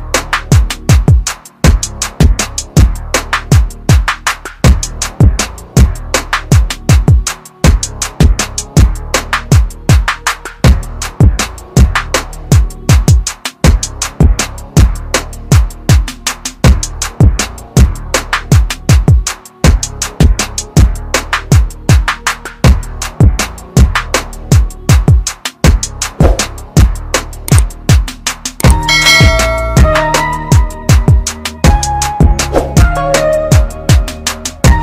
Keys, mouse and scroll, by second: 2.7-4.2 scroll up 1, 4.2 click, 9.5-10.5 scroll down 1, 11.3-13.0 scroll up 1, 14.0 click, 17.6 click, 21.8-23.3 scroll down 1, 23.3 space, 23.9 click, 27.0 click.